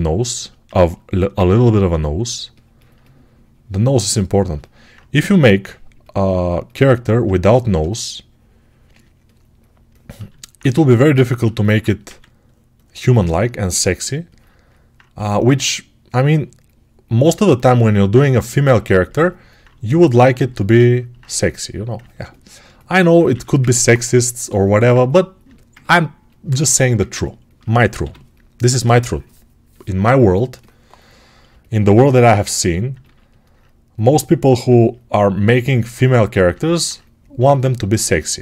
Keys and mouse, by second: 0.8-18.0 alt+right drag, 11.9 2, 15.0 1, 20.2-26.9 alt+right drag, 23.2 1, 26.5 1, 27.9 g, 33.0-35.3 alt+right drag, 35.5 alt+right click.